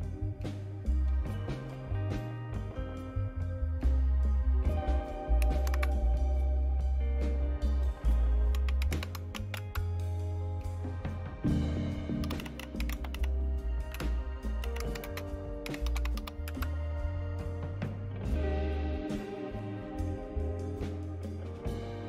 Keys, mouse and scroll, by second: 5.7 super+Right, 8.3-9.9 typing, 12.0-16.7 typing, 20.0-22.0 right drag.